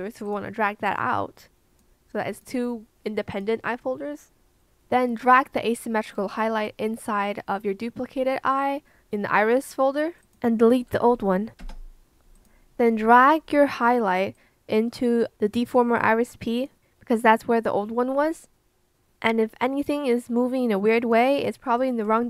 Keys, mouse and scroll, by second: 11.6 BackSpace.